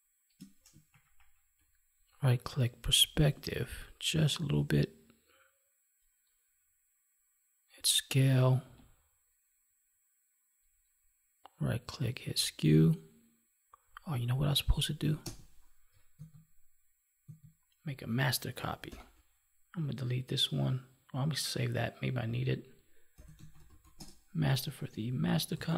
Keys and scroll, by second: 16.1 ctrl+z, 18.8 ctrl+j.